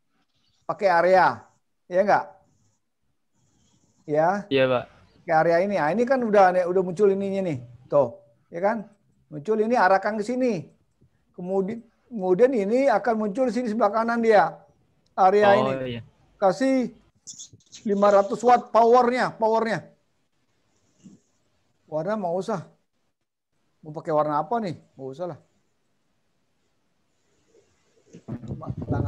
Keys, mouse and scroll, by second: 9.2 click, 10.9 click, 12.9 click, 22.4 click, 24.8 click, 26.8 click.